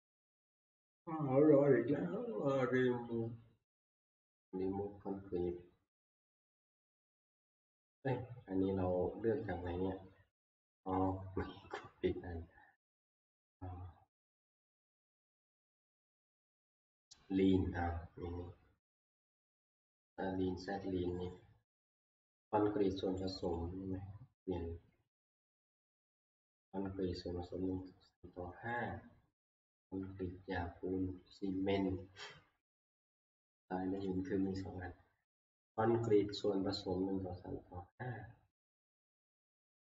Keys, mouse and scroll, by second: 2.7 scroll, 5.4 scroll, 7.8-9.5 middle drag, 9.5 scroll, 9.6 click, 11.1 click, 14.7 click, 16.1 scroll, 17.0-17.8 scroll, 18.3 scroll, 21.3 click, 23.3 click, 23.6 click, 34.1-39.1 drag.